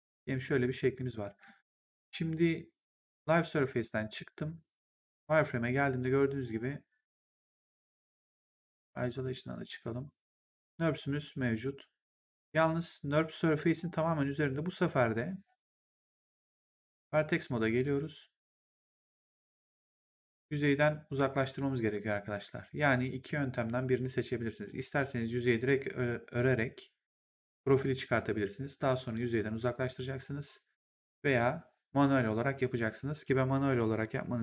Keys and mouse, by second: 1.1 w, 3.0 click, 5.4 click, 9.1 click, 12.2 click, 16.9 click, 18.8 click, 19.5 w, 20.2 click, 22.0 click, 23.1 click, 24.6 click.